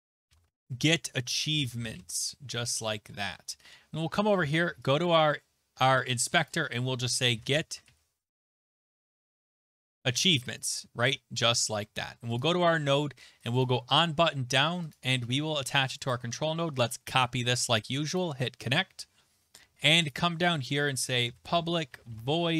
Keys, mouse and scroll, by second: 0.0-2.5 typing, 2.7 Return, 4.9 click, 6.5 click, 7.0-11.5 typing, 10.7 click, 12.4 click, 13.5 click, 13.6 click, 14.9 click, 16.1 click, 16.3 ctrl+a, 17.1 ctrl+c, 18.2 click, 19.5-19.9 scroll down 2, 20.1 click, 20.7 Return, 20.8-22.5 typing, 21.2 middle click.